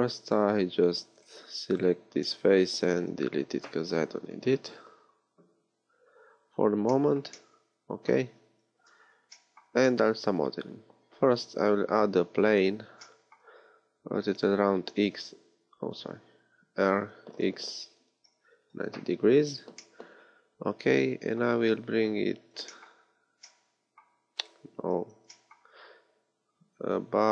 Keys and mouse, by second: 2.9 x, 8.4 Tab, 10.7 shift+a, 14.2 e, 14.8 x, 16.7 r, 19.8-22.5 drag, 22.5 r, 25.1 g.